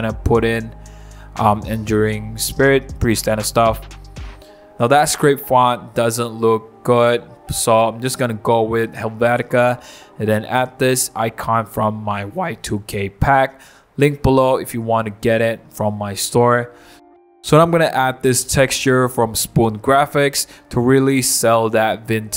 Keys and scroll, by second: 5.0 End, 5.4-9.4 typing, 10.1 super+d, 11.9 super+c, 12.0 super+c, 12.2 super+d, 13.1 super+v, 13.6 v, 14.6 super+i, 18.1 super+a, 18.9 super+c, 19.1 super+c, 19.5 super+d.